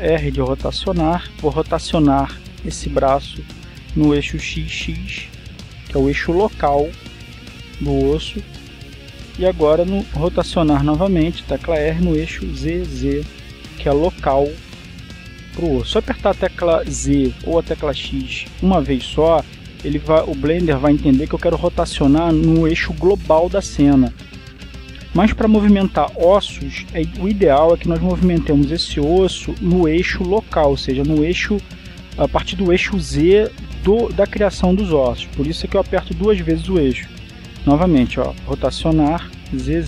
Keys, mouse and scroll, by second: 0.9 r, 5.5 x, 7.9 click, 11.4 r, 13.6 z, 16.5 click, 36.6 right click, 39.1 r.